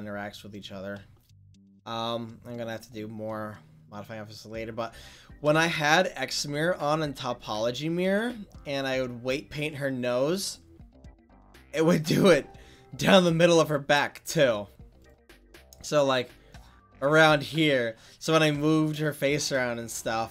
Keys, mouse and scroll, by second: 13.5-15.1 middle drag, 15.1-18.8 drag, 16.7-18.9 middle drag.